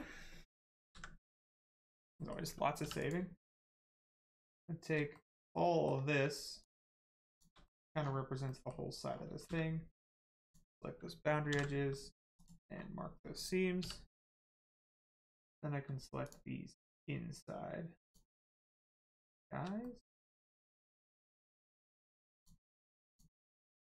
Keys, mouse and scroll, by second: 0.9 ctrl+s, 1.7 middle click, 2.8 3, 3.0 click, 3.4 middle click, 3.9 shift+click, 5.1 middle click, 5.2 middle click, 6.6 shift+click, 7.3 shift+click, 7.6 middle click, 8.0-8.4 scroll down 1, 8.4 middle click, 9.1-9.4 scroll up 1, 9.4 space, 10.4 click, 11.5 ctrl+e, 12.3 click, 12.7 scroll up 1, 13.8 3, 14.4 click, 14.8 middle click, 15.1 scroll up 1, 16.2 shift+click, 16.9 shift+click, 18.0 shift+click, 19.8 middle click, 19.9 middle click, 20.5 shift+middle click, 21.2 shift+click, 22.4 shift+click, 23.1 shift+click, 23.6 shift+middle click.